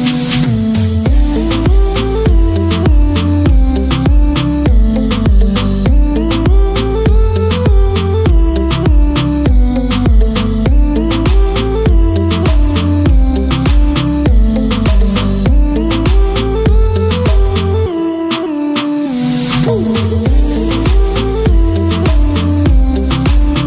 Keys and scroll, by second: 0.0-4.8 typing, 7.0-12.9 typing, 14.4 Return, 14.9-16.4 typing, 16.6 Return, 19.5 shift+,, 20.1 d, 20.5 t, 21.4 shift+., 22.3 Return.